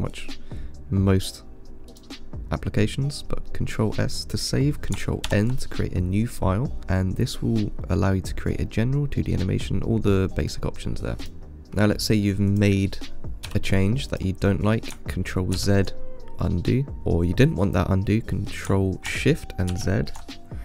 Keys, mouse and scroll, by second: 5.5 ctrl+n, 12.7 click, 13.7 s, 15.8 ctrl+z, 20.0 ctrl+shift+z.